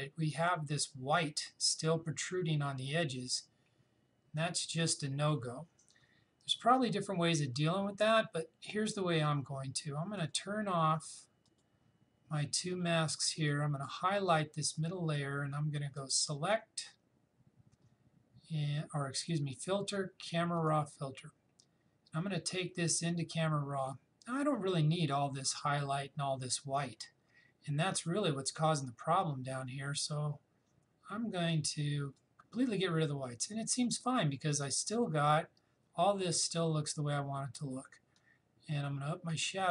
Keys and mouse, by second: 10.2 click, 18.2 click, 20.6 click, 31.5-34.8 drag, 38.2-39.7 drag.